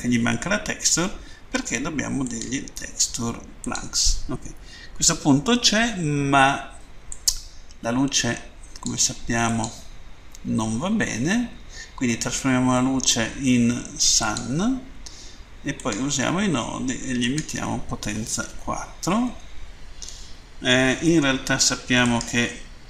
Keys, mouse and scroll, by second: 2.3 click, 3.6 click, 5.5-6.1 scroll up 1, 7.1 click, 9.3 click, 9.5 click, 13.9 click, 15.8 click, 17.2 click, 18.3 4, 19.2 Tab, 21.9 right click.